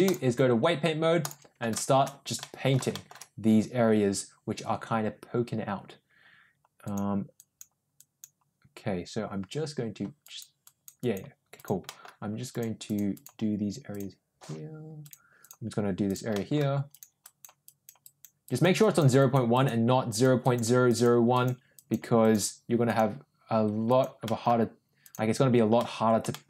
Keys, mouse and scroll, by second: 0.0-1.3 drag, 1.7 shift+middle click, 2.3 middle click, 2.9 shift+middle click, 6.8 click, 7.3 click, 7.9 click, 10.1 click, 10.6 click, 11.0 click, 11.5 click, 11.8 middle click, 12.4 click, 12.8 click, 13.1 click, 13.8 click, 14.9 click, 15.4 click, 16.0 click, 16.3 middle click, 16.9 click, 17.2 click, 17.6 click, 18.0 click, 18.4 click, 18.8 click, 19.2 click, 19.5 click, 20.0 click, 20.4 click, 20.8 click, 21.3 click, 21.7 click, 22.2 click, 22.8 click, 23.8 click, 24.2 middle click, 24.9 click, 25.7 middle click, 26.3 shift+middle click.